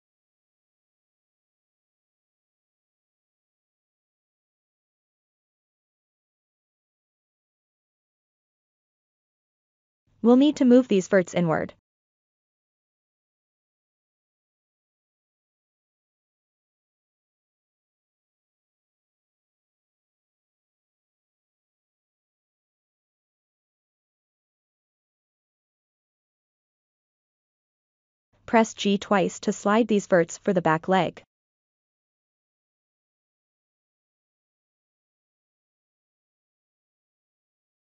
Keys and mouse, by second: 0.2 i, 2.3-3.3 middle drag, 3.5 click, 3.9 ctrl+z, 4.1 click, 4.5 KP_1, 4.7 click, 5.2 middle click, 5.5 i, 5.9 middle click, 6.4 ctrl+middle click, 6.7 1, 7.1 click, 7.9 click, 8.5-9.5 middle drag, 9.9-11.1 drag, 12.7-14.5 drag, 14.8-15.8 middle drag, 16.2 middle click, 16.8 click, 17.0 middle click, 18.4 middle click, 18.6 click, 19.4 click, 19.6 click, 19.9 middle click, 21.2 KP_3, 23.1 click, 23.9 shift+click, 24.4 middle click, 25.1 middle click, 26.7 middle click, 28.0 KP_3, 29.6-34.4 drag.